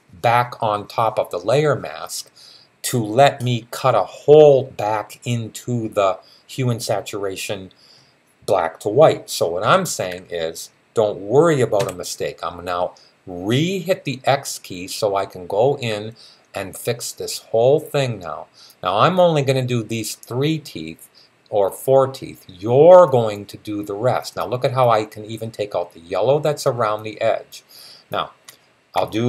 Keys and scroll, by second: 9.4-10.0 typing, 11.6 typing.